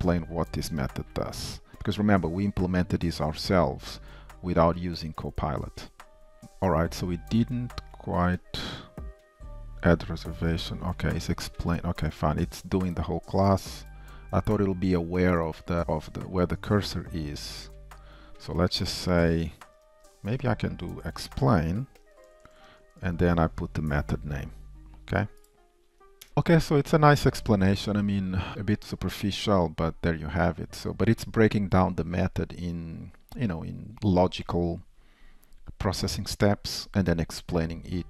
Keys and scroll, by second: 15.8 ctrl+w, 15.8 alt+Up, 16.4 ctrl+c.